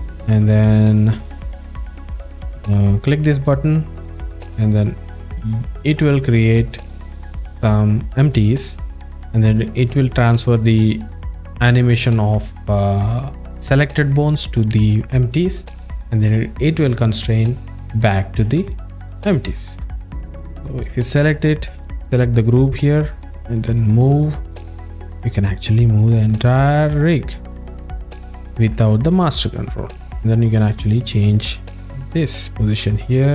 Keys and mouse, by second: 7.6 click, 8.7 alt+middle click, 18.9 alt+middle click, 19.4 ctrl+alt+middle click, 19.9-20.2 alt+middle drag, 21.0 w, 21.8-22.4 alt+middle drag, 23.2-23.7 alt+middle drag, 24.3 click, 26.6-27.8 alt+shift+middle drag, 28.0 alt+shift+middle click, 29.3 e, 30.4 click, 33.1-33.3 alt+shift+middle drag.